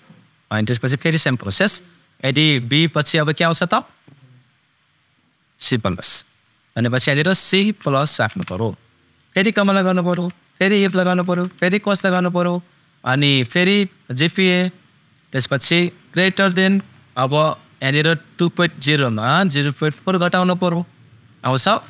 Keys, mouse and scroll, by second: 1.2 super+click, 7.0 super+click, 7.6 shift+super+c, 11.0 i, 11.2 super+f, 12.0 shift+super+9, 14.0 super+click, 16.4 shift+super+..